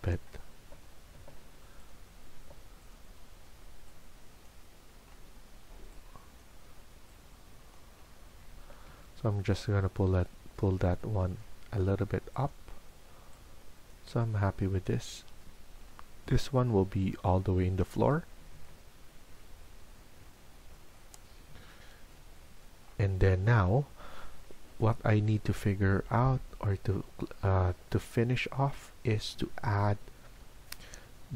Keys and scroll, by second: 1.8 Escape, 2.3 Escape.